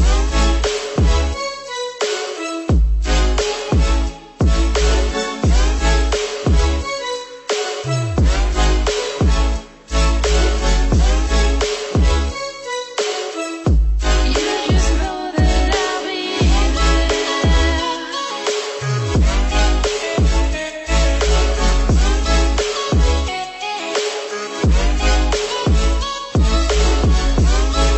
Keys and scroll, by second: 6.2 ctrl+-, 12.6 ctrl+=, 19.7 ctrl+-, 24.0 ctrl+=.